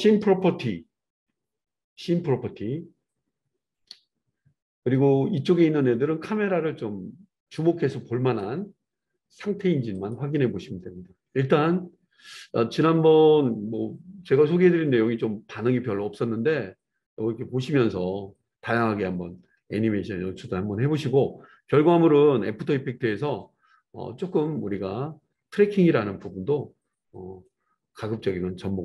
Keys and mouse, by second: 10.1-28.8 middle drag.